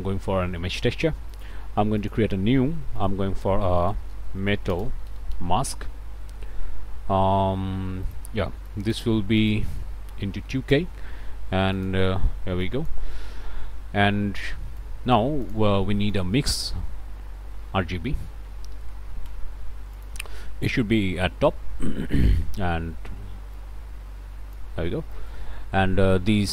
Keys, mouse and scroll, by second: 0.0 a, 0.5 Return, 1.3 click, 2.0 click, 2.9 shift+click, 3.7-5.6 typing, 8.0 click, 8.6 click, 9.4 click, 10.2 ., 10.4 2, 10.7 Return, 11.7 click, 12.6 click, 14.7 click, 16.1 shift+click, 16.3 shift+a, 16.5 shift+click, 17.4 m, 17.5 i, 17.7 x, 18.9 Down, 19.2 Return, 19.9 click, 21.2-22.4 drag, 23.5-24.7 drag, 25.1 shift+right click.